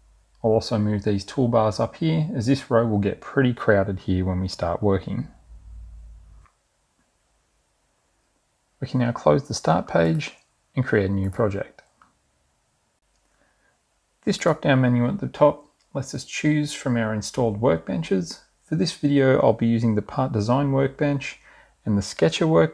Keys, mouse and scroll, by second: 0.3 click, 1.4 click, 5.2 click, 8.0 click, 9.1 click, 17.0 click.